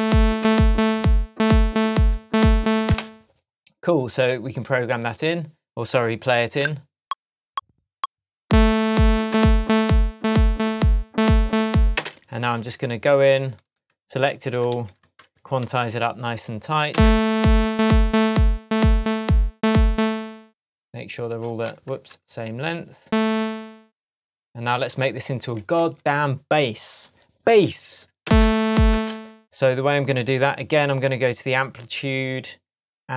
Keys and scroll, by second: 2.8 space, 11.9 space, 14.7 super+a, 15.6 super+u, 16.9 space, 20.1 space, 21.9 super+z, 25.7 shift+Tab, 28.2 space.